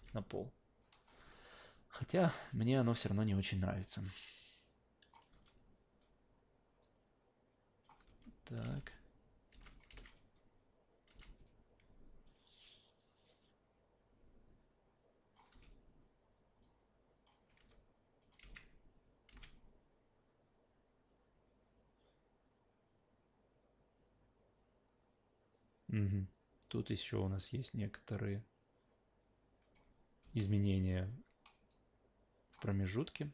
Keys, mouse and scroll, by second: 0.0 alt+v, 0.4 click, 1.3 alt+right click, 1.7 alt+click, 2.3 alt+middle drag, 4.2 click, 5.3 e, 6.8 click, 8.0 s, 8.6 alt+v, 9.5 alt+v, 9.7 click, 9.9 alt+v, 11.1 alt+v, 11.4-15.3 drag, 15.5 w, 16.6 click, 17.5 s, 18.2 click, 18.4 alt+v, 19.3 alt+v, 19.4-29.7 drag, 30.2 e, 31.7 click.